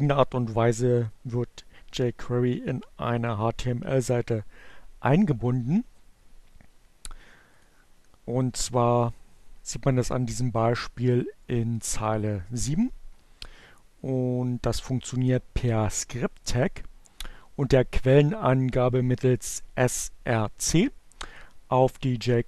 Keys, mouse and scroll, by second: 7.3 click.